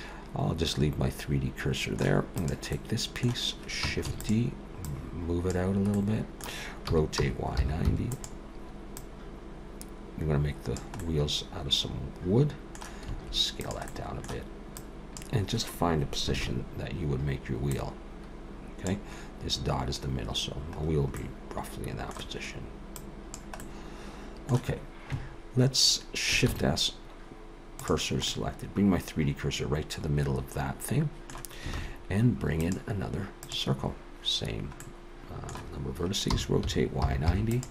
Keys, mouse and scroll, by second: 2.4 click, 2.7 middle click, 4.1 shift+d, 4.9 click, 5.9 middle click, 6.9 r, 9.0 click, 11.0 middle click, 13.1 s, 13.9 middle click, 14.8 click, 16.4 ctrl+KP_3, 17.7 click, 21.2 middle click, 23.0 click, 23.6 middle click, 26.5 shift+s, 28.3 middle click, 31.8 shift+a, 34.8 middle click, 36.3 r.